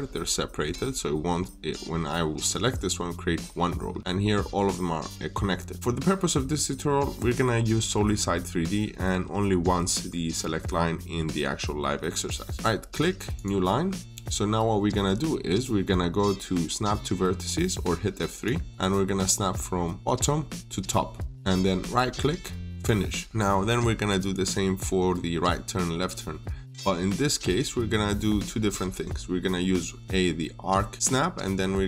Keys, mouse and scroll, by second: 5.7-7.1 scroll down 1, 10.8 middle click, 12.5 right click, 13.2 click, 18.7 scroll up 1, 19.8 click, 21.7 right click, 22.6 click, 23.2 middle click.